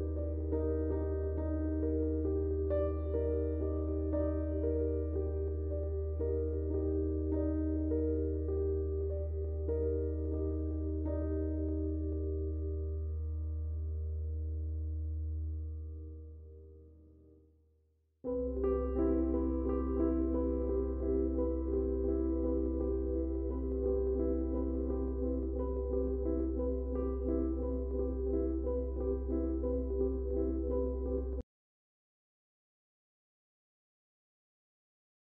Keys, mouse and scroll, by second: 3.0 click, 4.7 Tab, 7.2 Tab, 10.8 click, 17.8 click, 18.9 Tab, 20.1 click, 20.9 Tab, 22.5 typing, 23.5 click, 28.0 click, 30.5 typing, 31.7 click, 31.7 typing.